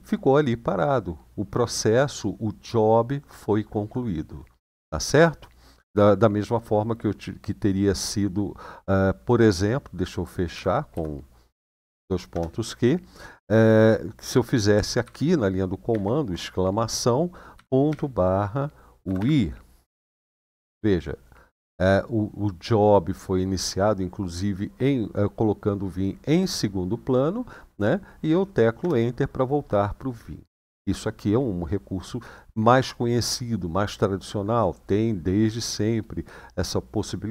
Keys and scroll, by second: 10.3-10.7 typing, 12.1 Return, 14.8-15.6 typing, 17.3-17.6 typing, 18.8-19.8 typing, 28.6 Return.